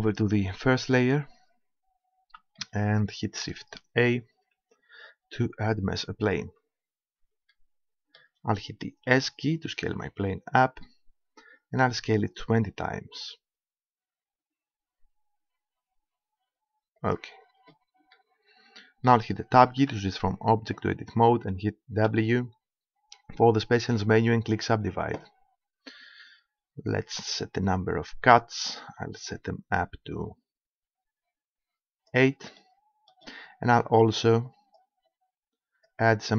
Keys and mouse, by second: 0.8-2.5 drag, 2.7 middle click, 4.6 shift+a, 9.1 s, 17.1-18.1 drag, 18.1 middle click, 19.8 Tab, 22.1 w, 26.9-29.0 drag, 32.6-34.4 middle drag, 34.5-36.3 drag.